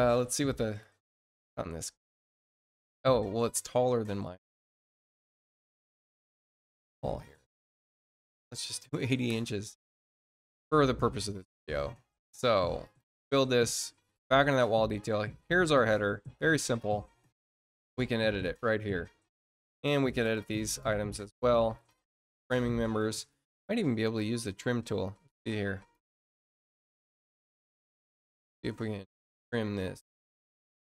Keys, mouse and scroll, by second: 0.3 click, 0.3 space, 4.2 click, 11.1 click, 12.7 click, 13.4 click, 14.8 middle click, 14.8 scroll up 1, 15.3 middle click, 15.3 scroll up 1, 15.7 click, 16.7-17.8 drag, 18.7 middle click, 20.2 click, 21.2 middle click, 21.7 click, 25.0 click, 26.4 click, 29.2 click, 29.9 click.